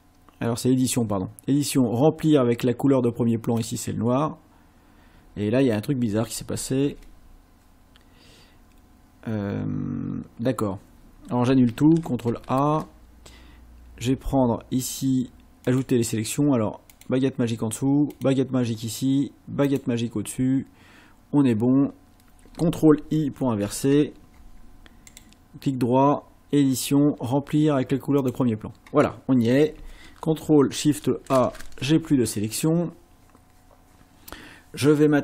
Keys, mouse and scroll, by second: 3.5 click, 6.9 ctrl+z, 12.1 ctrl+shift+a, 15.7 click, 16.9 click, 18.1 click, 19.7 click, 23.6 ctrl+i, 25.1 right click, 28.2 click, 31.3 ctrl+shift+a.